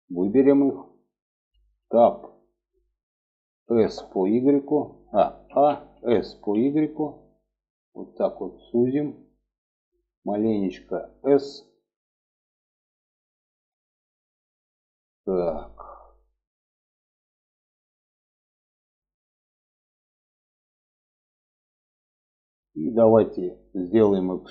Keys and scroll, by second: 1.2 Tab, 3.0 s, 4.8 a, 5.3 s, 11.1 s.